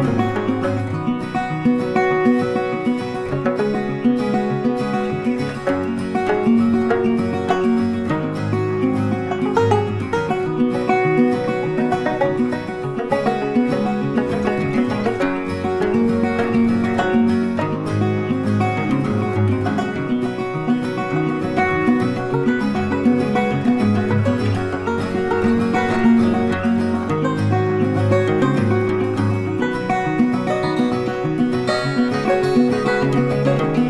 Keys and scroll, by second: 28.7 ctrl+t.